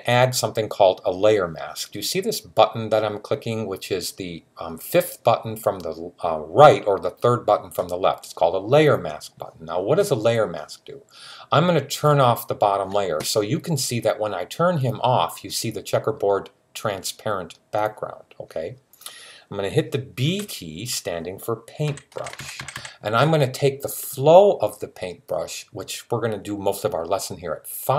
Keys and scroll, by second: 20.0 typing, 21.7-22.5 typing.